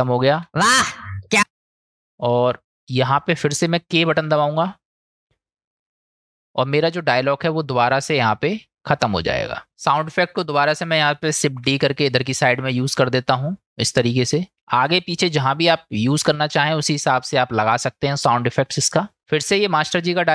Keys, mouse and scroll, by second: 2.1 click, 3.6 click, 4.6 k, 5.7 click, 8.0-9.1 middle drag, 10.0 click, 11.5 shift+d, 14.2 click.